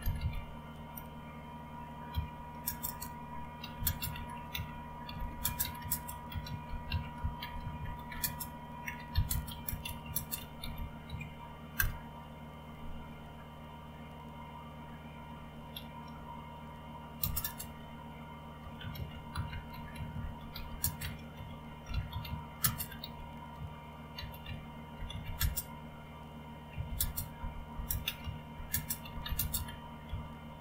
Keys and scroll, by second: 0.0-0.8 typing, 2.1-11.8 typing, 15.7 typing, 18.4-30.6 typing.